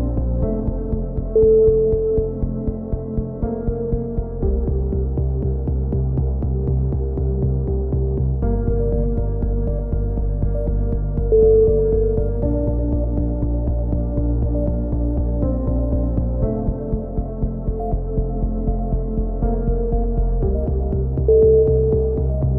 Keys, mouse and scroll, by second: 0.8 click, 3.1 z, 3.5 z, 3.8 z, 4.1 middle click, 5.1 click, 5.4 Tab, 6.1 z, 6.4 Tab, 8.1 c, 9.3 right click, 10.2 middle click, 10.5-11.5 drag, 12.3 click, 12.5 middle click, 12.6 click, 14.7 click, 17.1-18.2 middle drag, 18.0 z, 18.2 click, 19.7 middle click, 20.4 a, 20.8 z.